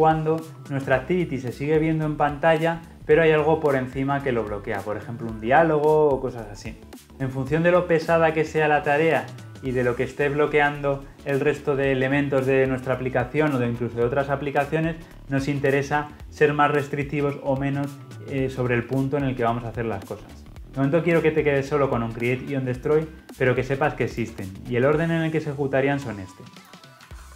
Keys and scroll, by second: 27.0 ctrl+x.